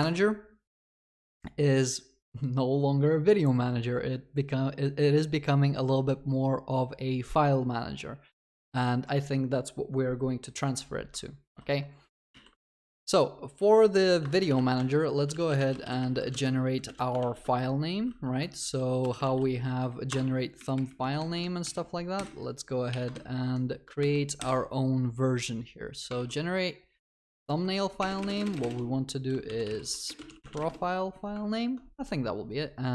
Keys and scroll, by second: 11.5 ctrl+w, 12.1 ctrl+c, 16.3 ctrl+s, 17.3 ctrl+v, 20.1 Return, 24.4 ctrl+b, 26.1 ctrl+d.